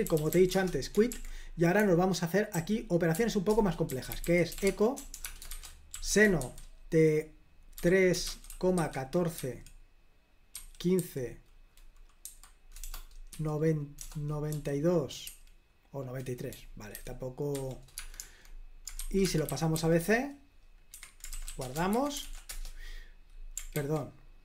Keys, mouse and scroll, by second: 0.0-9.4 typing, 1.2 super+l, 3.6 Return, 10.6-11.0 typing, 12.3 typing, 13.4 typing, 14.6-15.5 typing, 17.0-22.0 typing, 21.0 Escape, 22.3 ctrl+p, 22.5 Return, 23.9 ctrl+c.